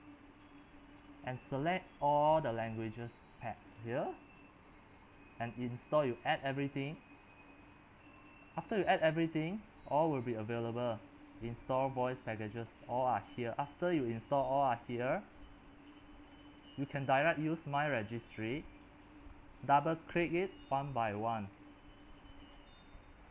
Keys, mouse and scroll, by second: 9.5-15.6 middle drag, 9.5 scroll, 9.7-12.6 scroll, 13.3 scroll, 14.9-15.6 scroll, 15.6-16.6 scroll up 10, 16.6-23.3 drag.